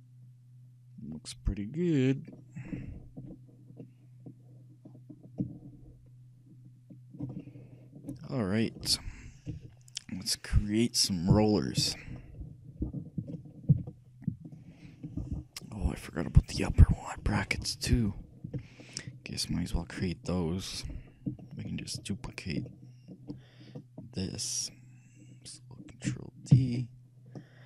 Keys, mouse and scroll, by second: 2.5-7.3 middle drag, 7.6-9.6 shift+middle drag, 9.6 shift+KP_3, 12.2-13.8 middle drag, 14.0 shift+z, 18.9-20.5 shift+middle drag, 21.0-22.7 shift+middle drag, 22.9 shift+middle click, 24.4-26.2 shift+right drag, 26.6 shift+d.